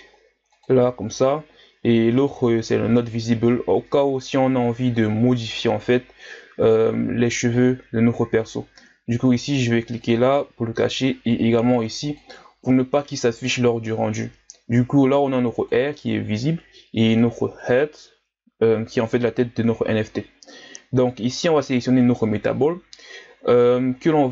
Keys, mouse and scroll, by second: 2.2-4.8 drag, 4.8-7.8 scroll down 1, 9.9-15.0 drag, 15.5-17.9 drag, 22.1-23.9 right drag, 23.9-24.3 scroll down 2.